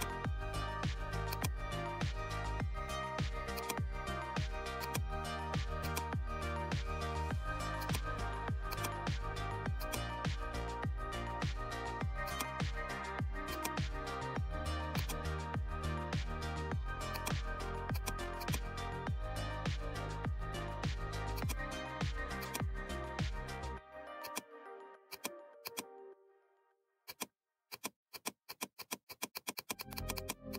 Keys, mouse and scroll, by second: 3.5-7.7 drag, 12.2 click, 14.9 click, 17.1 click, 17.1-21.3 drag, 24.1-27.0 drag.